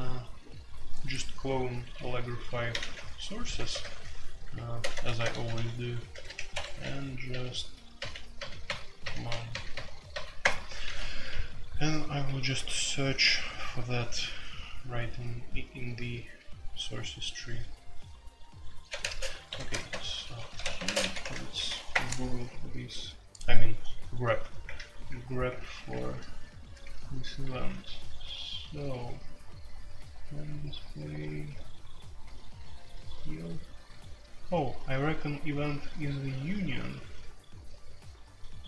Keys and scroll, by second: 1.9-10.1 typing, 6.5 Escape, 10.4 Return, 11.9 typing, 18.9-21.9 typing, 21.2 shift+Insert, 21.9 Return, 24.6 shift+Page_Up, 24.6-25.6 typing, 25.9 shift+Page_Up.